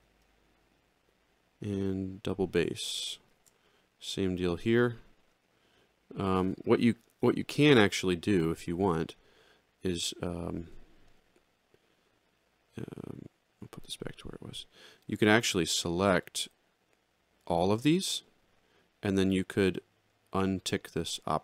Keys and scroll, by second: 3.3 ctrl+shift+l.